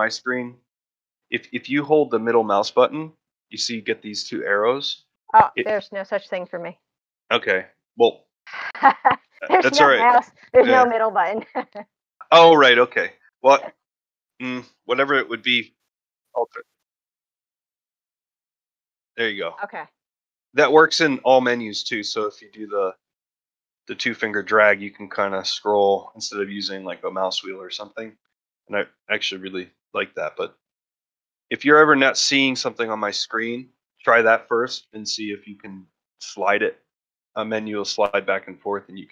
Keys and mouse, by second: 2.0-5.1 middle drag, 6.5-7.7 middle drag, 8.8 middle click, 13.5-14.6 middle drag, 17.7-19.2 middle drag, 19.9-21.7 middle drag, 22.1-23.7 middle drag, 24.4-27.7 middle drag, 28.5 middle click, 30.4 middle click, 33.6-34.7 middle drag, 35.6 middle click.